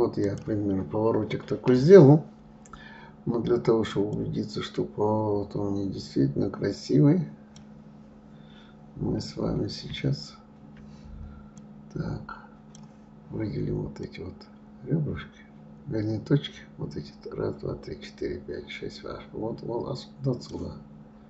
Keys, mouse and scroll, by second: 4.4-6.8 drag, 7.3-9.9 right drag, 11.8-17.3 drag, 20.8-21.2 right drag.